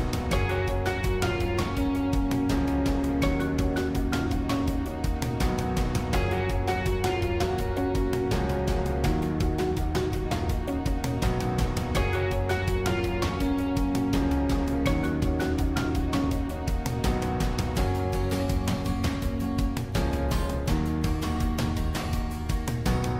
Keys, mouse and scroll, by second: 1.5 shift+click, 3.8 shift+click, 8.0 shift+click, 8.7-11.8 middle drag, 14.4 shift+click, 16.4 shift+click, 16.8-20.4 middle drag, 20.4 shift+click, 21.4 shift+click, 22.3 shift+click, 22.6-23.1 middle drag.